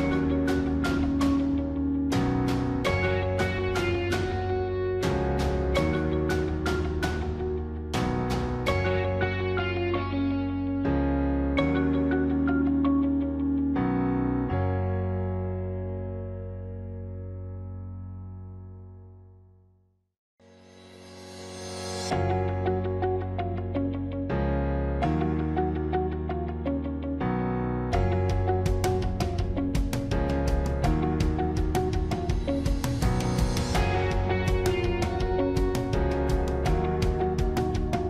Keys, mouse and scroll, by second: 13.8 ctrl+-, 22.1 ctrl+-, 34.0 ctrl++, 35.8 ctrl+-, 36.1 ctrl++, 36.2 ctrl+-, 37.4 ctrl+-.